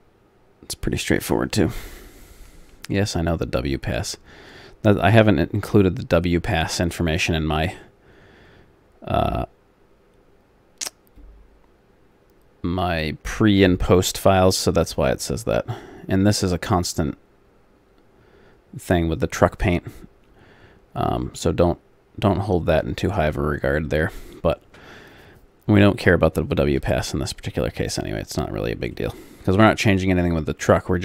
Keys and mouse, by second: 27.7 middle click, 28.9-30.9 middle drag.